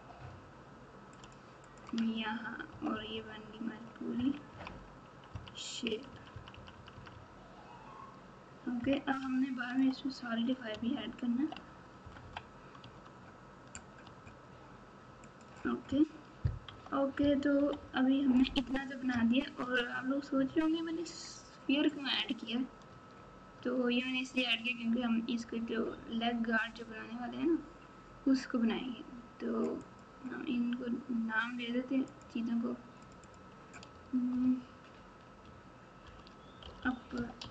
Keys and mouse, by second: 1.6 click, 1.9 Tab, 2.6 KP_8, 2.9 KP_8, 3.1 KP_8, 4.1-8.8 typing, 9.2 KP_Subtract, 9.7 KP_Subtract, 11.0 ctrl+KP_8, 12.0 KP_Subtract, 12.2 KP_Subtract, 12.8 Tab, 14.0 Tab, 15.2 click, 16.6 KP_Multiply, 16.7 KP_1, 17.5 KP_Subtract, 17.8 KP_Subtract, 18.3 KP_Subtract, 19.1 KP_Add, 19.6 KP_Add, 19.7 KP_Add, 22.9 Tab, 23.5 Tab, 32.0 click, 33.3-37.5 drag, 36.8 p.